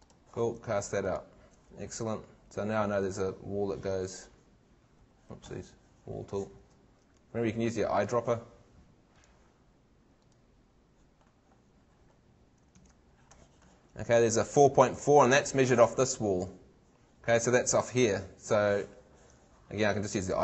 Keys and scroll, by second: 5.1 Escape, 12.8 super+Tab, 16.3 super+Tab.